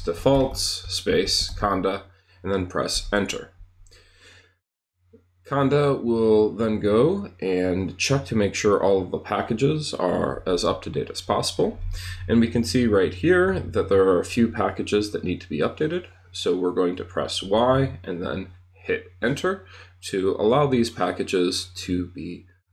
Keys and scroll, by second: 0.0-2.0 typing, 2.9 Return, 17.2 y, 19.2 Return.